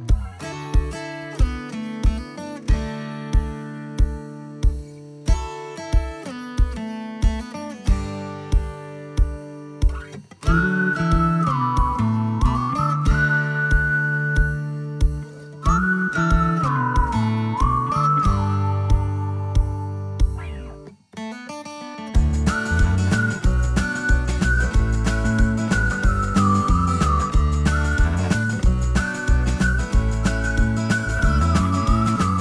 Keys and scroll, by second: 3.5-5.1 typing, 9.7-11.2 typing, 12.4 typing, 12.8 Delete, 13.0 Delete, 13.1 Delete, 13.5 Escape, 19.7 ctrl+s.